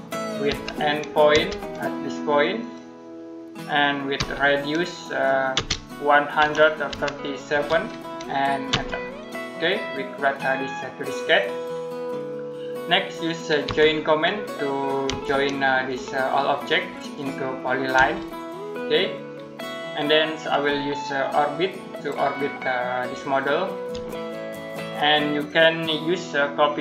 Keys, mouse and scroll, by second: 0.3 e, 1.2 space, 2.4 click, 4.0 r, 5.4-7.3 typing, 8.5 space, 13.5 j, 14.9 space, 15.7 click, 17.8 space, 19.4 middle click, 21.0 shift+middle click, 24.1 middle click, 24.8 scroll up 1, 26.7-26.8 typing.